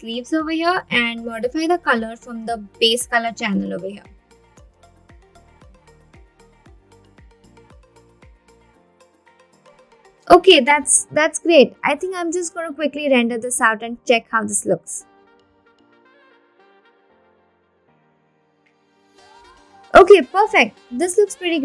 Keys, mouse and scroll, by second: 0.4-1.6 scroll down 8, 2.1-4.7 scroll down 6, 4.7-5.5 scroll down 3, 5.5 click, 5.5 scroll down 1, 6.7 click, 6.9 click, 8.8 click, 13.1-14.5 drag.